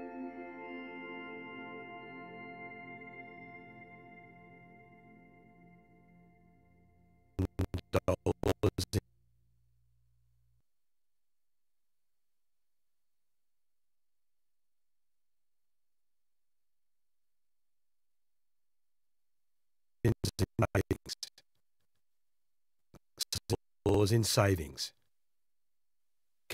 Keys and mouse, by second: 1.3 click, 2.6 g, 3.1 click, 5.9 i, 7.3 Right, 7.4 Right, 7.6 Right, 7.8 Right, 8.0 Right, 8.1 Right, 8.3 Right, 8.5 Right, 8.6 Right, 8.8 Right, 9.9-11.6 drag, 12.6 i, 13.9-15.9 drag, 15.9 Delete, 16.2-17.2 drag, 17.5 shift+d, 19.3-21.2 shift+drag, 22.1-23.4 drag, 23.8 space.